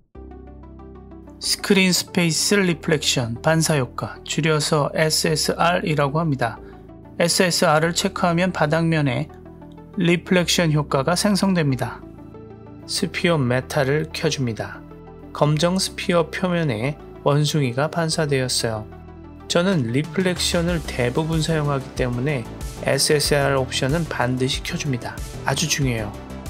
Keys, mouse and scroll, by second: 0.2 scroll down 1, 7.2 click, 10.0 click, 10.6 click, 13.0 click, 13.5 click, 17.9 click, 19.0 click, 21.0 click, 21.6 click, 24.9 click, 26.2-26.4 middle drag.